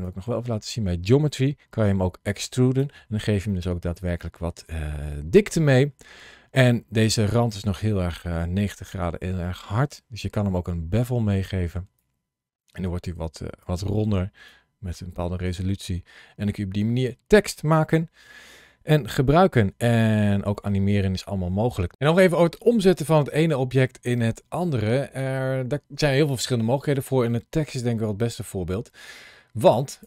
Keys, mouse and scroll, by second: 1.7 click, 3.3 middle click, 4.7-5.2 scroll up 1, 5.2-7.2 scroll up 1, 11.8 click, 14.3 click, 15.9-16.3 scroll down 2, 20.4 shift+middle click, 21.5 shift+middle click, 27.5-29.0 scroll up 1, 29.0 scroll down 1, 29.4-29.8 scroll up 1.